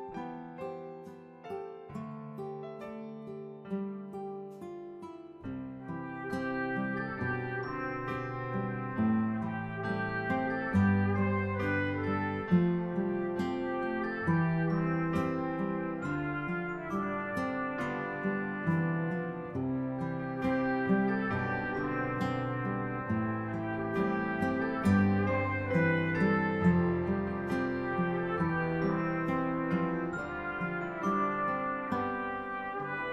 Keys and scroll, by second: 4.4-8.5 typing, 25.1 Delete, 30.9 Delete.